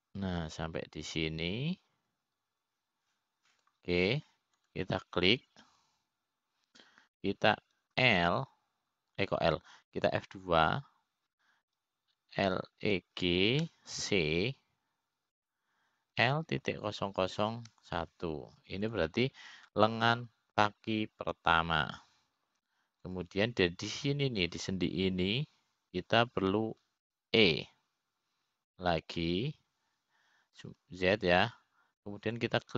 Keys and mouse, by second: 7.3-9.2 drag, 12.5 l, 12.9 F2, 25.7-27.7 drag, 29.8 e.